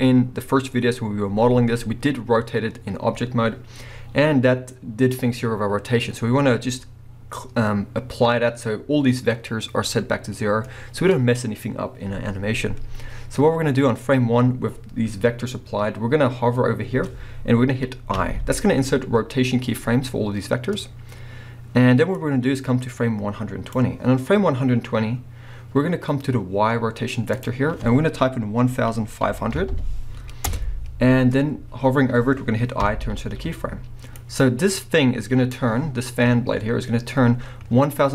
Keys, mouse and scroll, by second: 22.1-26.1 drag, 27.3 click, 29.7 0, 30.5 Return, 34.2 click.